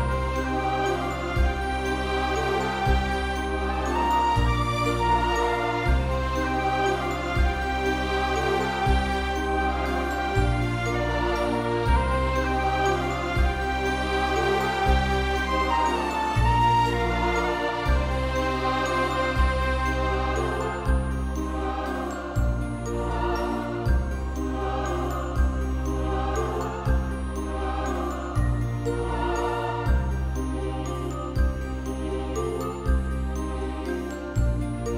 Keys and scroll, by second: 0.7 ctrl+i, 5.1 ctrl+=, 5.2 ctrl+=, 5.3 ctrl+=, 5.4 ctrl+=, 5.7 space, 6.6 [, 8.2 [, 11.9 space, 12.8 space, 15.6 [, 21.0 space, 23.5-24.0 ], 25.5 space, 27.0 space, 28.9 space.